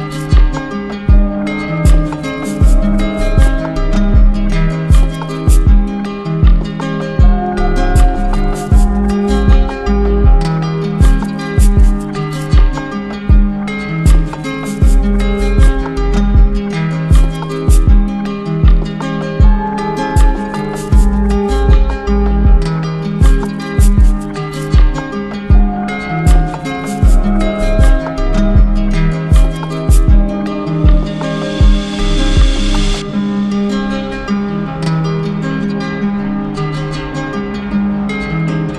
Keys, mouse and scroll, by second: 3.8 click, 5.2 click, 6.4 click, 7.2 ctrl+d, 7.4 ctrl+d, 10.5 click, 12.2 click, 12.4 ctrl+z, 12.6 ctrl+z, 13.2 click, 14.2 click, 14.7 alt+click, 15.0 alt+click, 16.9 click, 18.4 right click, 20.2 click, 22.4 click, 25.1 click, 25.9 click, 26.8 click, 27.5 click, 28.0 ctrl+d, 28.2 ctrl+d, 29.2 click, 30.0 click, 30.2 ctrl+z, 31.2 click, 31.3 ctrl+z, 32.0 click, 32.9 click, 33.2 shift+click, 33.8 shift+click, 35.6 click.